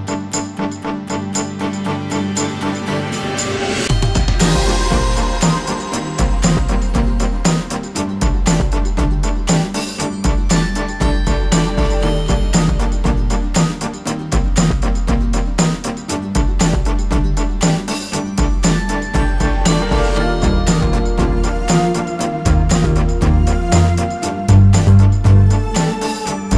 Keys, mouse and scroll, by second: 0.4 alt+scroll up 1, 1.0-1.6 alt+scroll up 1, 1.8 alt+scroll down 1, 2.6 space, 2.8 click, 4.1 ctrl+g, 5.5 click, 7.1 alt+scroll up 1, 7.4 alt+scroll down 1, 7.8 ctrl+alt+scroll up 2, 9.9 ctrl+click, 14.1-16.8 ctrl+drag, 16.8 ctrl+shift+[, 18.8 click, 22.0 click, 24.0 click, 25.3 click.